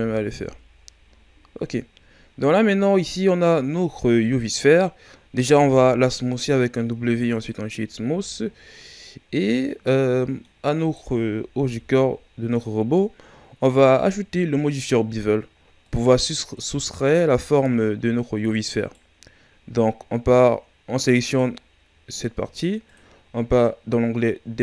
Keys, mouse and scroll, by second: 0.2 a, 0.5-1.0 scroll down 2, 1.0 shift+scroll up 3, 1.7-2.3 ctrl+scroll up 1, 2.3 scroll up 2, 4.3 right click, 5.4 w, 8.1 a, 8.5 scroll down 3, 8.7-10.8 middle drag, 10.8 right click, 11.6 KP_1, 15.8-17.0 drag, 17.0-18.7 scroll up 2, 18.7-22.8 right drag, 22.8-24.6 drag.